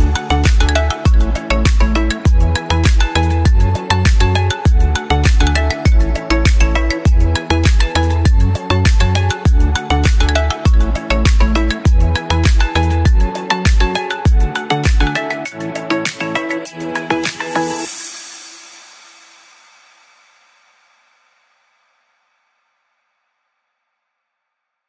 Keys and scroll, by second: 6.9 Right, 17.9 Delete.